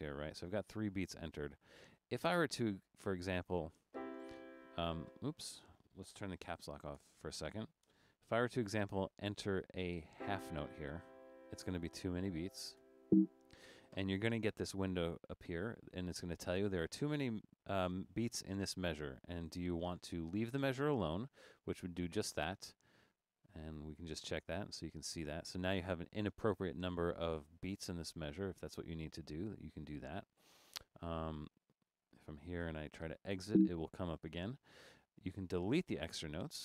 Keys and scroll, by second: 0.4 Right, 5.4 Left, 7.0 BackSpace, 8.2 Caps_Lock, 12.9 6, 32.3 Right, 33.3 Right.